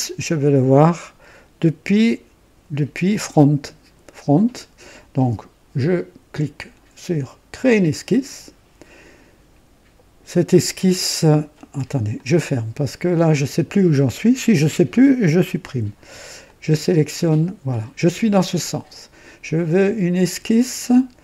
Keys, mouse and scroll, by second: 3.0 click, 7.5 click, 12.1 click, 15.1 click, 15.6 Delete, 16.4 click, 17.6 click, 20.1 click.